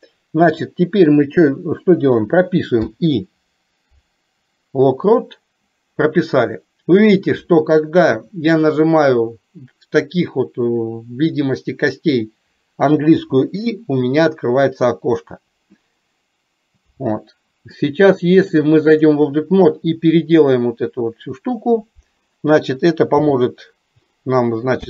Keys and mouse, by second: 18.5 click.